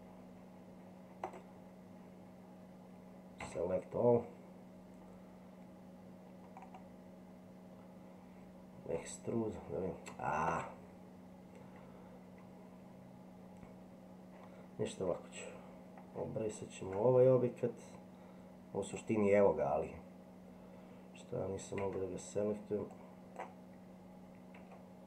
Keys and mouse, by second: 1.2 right click, 3.5 a, 9.0 e, 17.3 Tab, 18.9 click, 21.8 Tab, 23.0 click, 24.6 Tab.